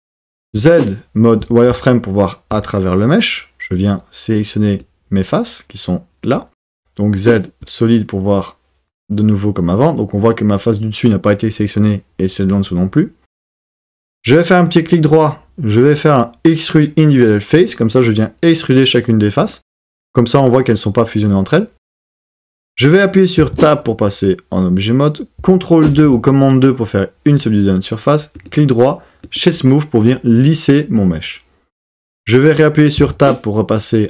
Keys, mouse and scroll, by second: 0.5 z, 3.9-4.9 drag, 6.7 z, 14.7-19.6 drag, 23.5 Tab, 25.9 super+2, 28.4-29.4 drag, 33.0 Tab.